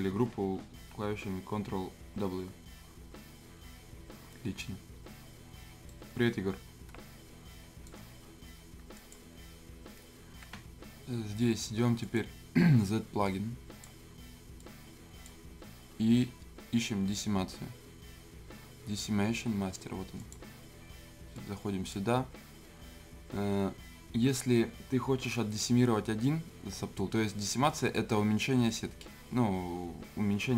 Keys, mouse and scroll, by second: 0.8 ctrl+w, 5.9-8.9 right drag, 8.9 click, 12.0 click, 12.0-17.8 drag, 20.2-24.3 drag, 27.7 click.